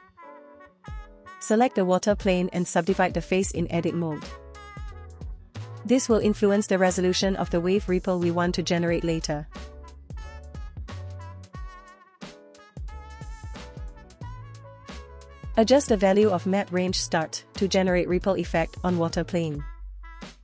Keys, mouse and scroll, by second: 0.3 Tab, 1.4-6.5 right drag, 7.9 3, 8.3 right click, 10.8 click, 12.1 middle click, 12.4 scroll up 1, 12.5 Tab, 12.8 space, 18.1-20.4 drag.